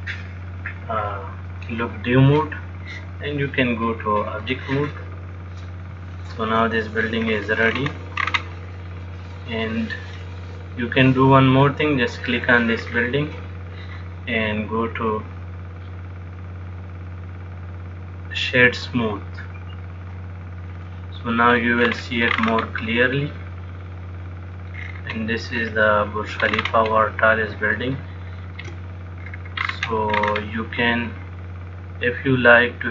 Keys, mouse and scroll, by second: 0.1 click, 2.4 click, 4.0 click, 6.4 shift+middle click, 7.5-8.5 scroll down 4, 8.0-8.5 scroll up 2, 8.5-9.0 scroll up 8, 9.0 middle click, 13.2-14.8 scroll down 1, 14.8 click, 14.8-15.7 scroll down 3, 21.1 middle click, 21.6-22.1 scroll down 4, 22.1-23.5 scroll up 11, 23.5 middle click, 25.0-25.8 scroll down 1, 25.8-26.5 scroll down 7, 26.6-27.1 scroll up 6, 27.1-27.8 scroll down 1, 28.0 shift+middle click, 29.5-29.9 scroll down 4, 29.9-31.1 scroll up 8, 31.3 middle click.